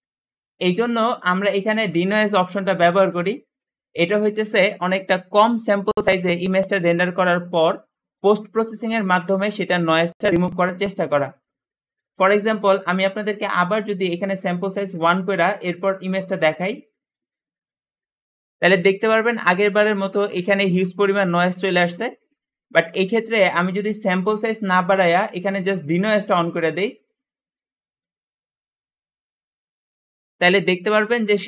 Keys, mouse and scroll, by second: 13.6-16.5 drag, 14.3-15.5 typing, 17.2 click, 27.0 click, 29.1 click, 29.8 click.